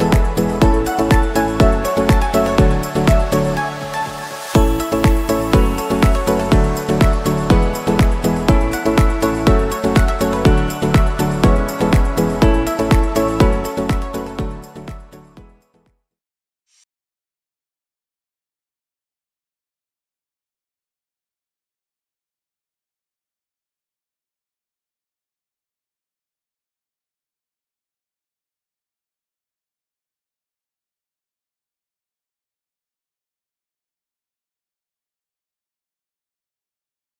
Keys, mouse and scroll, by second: 0.2-0.5 scroll up 2, 0.8 scroll down 2, 2.2 middle click, 2.8 scroll down 1, 2.9 click, 3.0-3.4 scroll up 5, 3.3 shift+click, 3.4 g, 5.1 KP_7, 5.5 click, 5.6 g, 6.0 click, 6.1 g, 7.1 g, 7.9 click, 8.0 scroll down 2, 8.0 middle click, 8.3 middle click, 9.4-9.8 scroll down 3, 9.7 scroll up 2, 9.8 middle click, 10.4 click, 10.5 middle click, 10.9-13.0 typing, 12.2 scroll up 4, 12.3 middle click, 14.1 middle click, 14.1 g, 14.3 s, 14.5 g, 14.8 g, 15.5 middle click, 16.1 Tab, 16.1 middle click, 16.4 scroll up 3, 16.5-19.1 typing, 16.6 click, 17.8-18.3 scroll down 6, 17.8 middle click, 21.7 scroll down 5, 21.8-22.3 shift+scroll up 11, 21.9 shift+middle click, 22.3 middle click, 22.6 shift+middle click, 22.9-23.5 scroll down 8, 23.6 g, 24.5 middle click, 24.8 scroll down 1, 24.9 ctrl+r, 26.1 Tab, 26.2 click, 26.4 middle click, 26.6 scroll down 3, 26.7 shift+middle click.